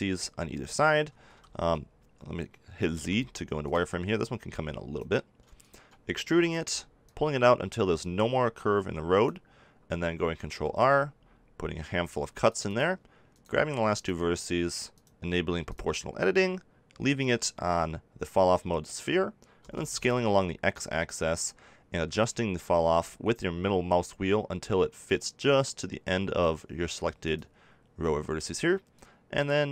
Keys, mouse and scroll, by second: 1.4 x, 2.9 z, 6.2 e, 8.5 click, 10.4 ctrl+r, 12.7 click, 14.5 right click, 15.6 click, 19.5 s, 27.3-29.7 drag.